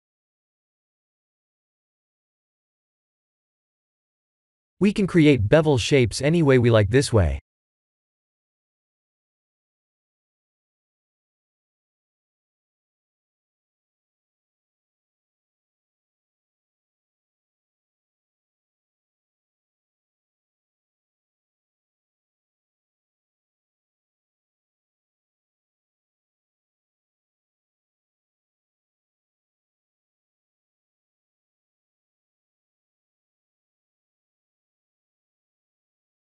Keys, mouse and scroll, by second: 0.3-2.5 drag, 3.8-5.0 drag, 6.2-7.7 drag, 9.6-10.6 drag, 11.2-12.7 middle drag, 14.2-15.6 drag, 17.1-17.9 drag, 19.0-20.2 drag, 20.7-25.2 middle drag, 26.4-28.4 drag, 29.0 click, 30.1-31.6 drag, 32.2-33.1 drag, 33.9-34.9 drag, 35.7-36.2 middle drag.